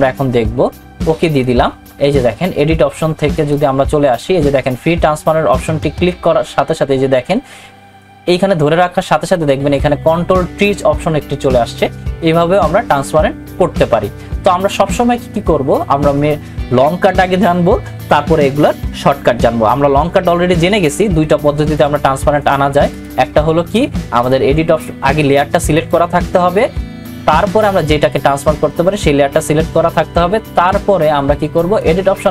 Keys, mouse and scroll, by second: 1.3 click, 21.7 click, 31.8 click, 31.8 click.